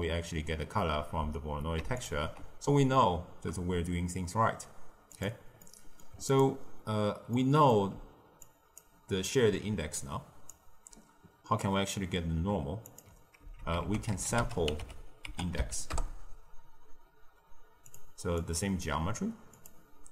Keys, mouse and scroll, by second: 1.9 ctrl+shift+click, 5.0 click, 5.5-6.2 middle drag, 6.2 click, 7.3 middle click, 7.8 d, 8.3 click, 8.7-9.8 d, 9.9-10.4 drag, 10.4-10.8 d, 12.8 click, 13.3 ctrl+x, 13.8 ctrl+a, 18.3 click, 19.5-20.1 drag.